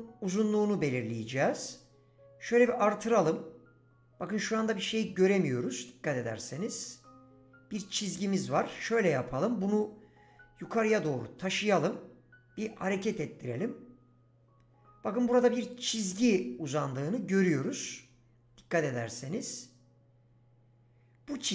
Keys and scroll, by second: 8.5 ctrl+z.